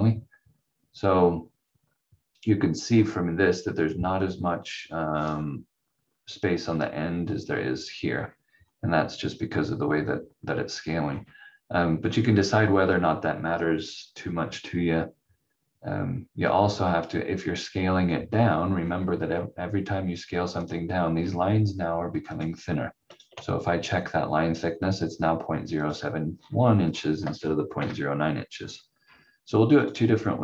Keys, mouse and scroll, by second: 2.5-2.8 scroll up 1, 8.0-8.6 scroll down 1, 11.0-12.9 scroll up 1, 16.4 scroll up 1, 20.6 click, 21.1-22.3 scroll up 1, 22.3 click, 26.3 scroll down 1, 27.7 Delete, 28.6-29.0 scroll down 1, 29.8 click.